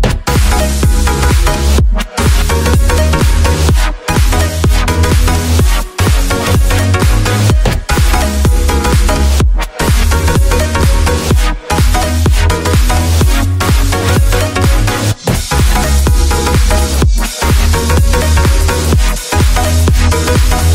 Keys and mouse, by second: 0.2 ctrl+s, 13.4 ctrl+s, 13.8 a, 13.9 a, 14.6-14.9 drag, 15.4-16.3 drag, 18.9 click, 19.3 click, 20.3 w.